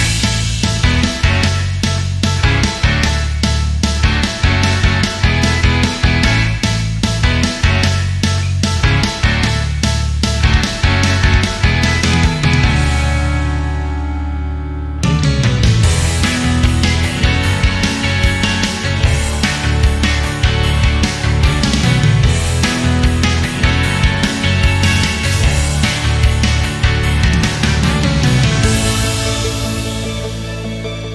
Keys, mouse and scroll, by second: 2.1 scroll down 2, 2.2-3.2 middle drag, 3.2 r, 4.7 middle click, 4.9-6.1 scroll up 2, 6.1-7.1 middle drag, 7.1-8.1 drag, 8.1-8.8 middle drag, 8.8 click, 9.6-10.3 middle drag, 10.3 click, 11.2 middle click, 12.0 click, 13.3 drag, 13.5-14.3 middle drag, 14.3 drag, 14.7 shift+click, 15.1-15.8 shift+middle drag, 15.8 drag, 16.7 click, 17.4-18.4 middle drag, 18.4 drag, 19.1 click, 19.6 click, 19.8 scroll down 1, 19.8-20.4 middle drag, 20.4 scroll down 1, 20.6 middle click, 21.2 KP_7, 22.9-23.3 scroll down 1, 23.3 click, 24.1 shift+middle drag, 24.3 click, 24.7 click, 26.4 shift+d, 30.2 ctrl+z.